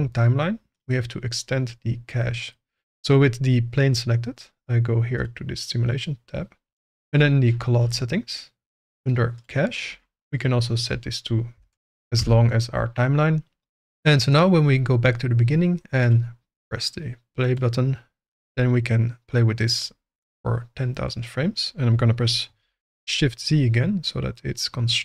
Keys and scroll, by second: 11.5 1, 11.7 0, 12.2 Return, 18.3 g, 21.9 g, 23.0 shift+z.